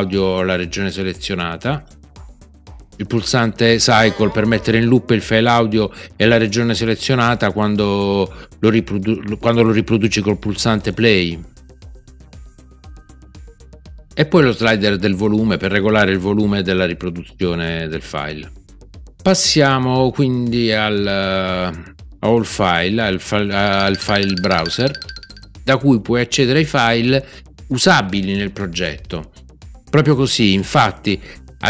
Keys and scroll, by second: 4.0 ctrl+c.